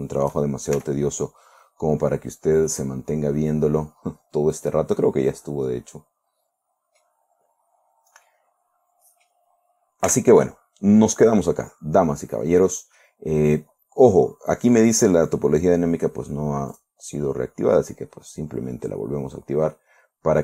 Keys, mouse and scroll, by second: 0.3 shift+right click, 1.3 shift+f, 1.9 scroll down 2, 2.5 scroll down 2, 3.1-7.7 drag, 7.8-8.5 scroll down 4, 8.7-9.9 drag, 10.5 Tab, 11.5-11.9 scroll down 2, 12.9 middle click, 17.2 click.